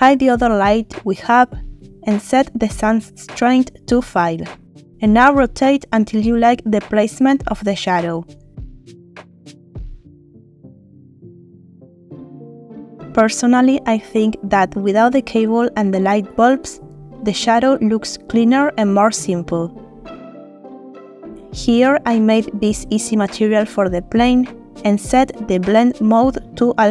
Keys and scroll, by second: 1.9 z, 4.0 Return, 6.0 r, 6.9 Escape.